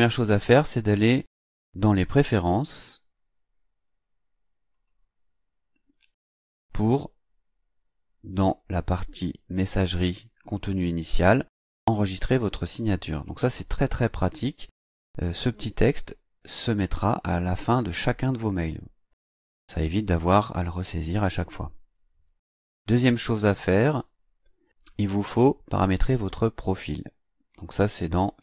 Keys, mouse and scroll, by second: 2.6 click, 9.5 click, 23.6 click.